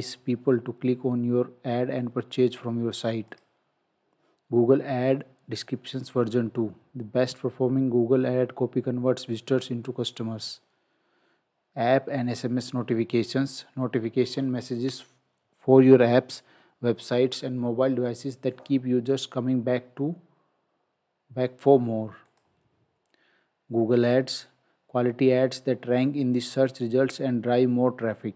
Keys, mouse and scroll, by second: 3.3 click, 10.4 click, 22.3 click.